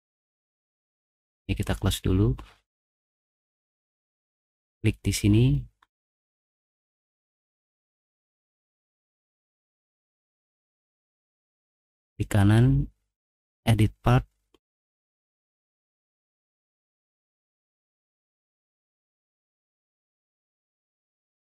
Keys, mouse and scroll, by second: 1.4 click, 4.0 click, 6.5 middle click, 7.1 middle click, 7.7 middle click, 13.2 click, 16.4 right click, 19.6 click.